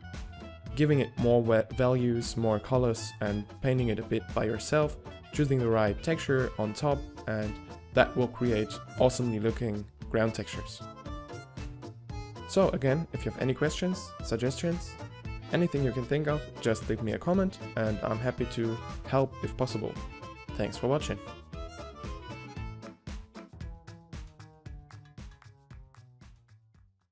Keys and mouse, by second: 0.0-0.4 typing, 0.8-1.9 drag, 2.4 middle click, 4.0-4.8 right drag, 4.8 g, 4.9 g, 5.0-5.8 drag, 6.5 n, 7.0 click, 7.4 n, 7.6 g, 11.4 g, 12.1-12.4 middle drag, 14.9 middle click, 15.6 g, 17.2 ctrl+Up, 18.0 g, 18.8 middle drag, 19.0-19.6 middle drag, 23.2 middle drag, 24.1 middle click, 24.4 middle click, 24.4 middle click, 24.6 g.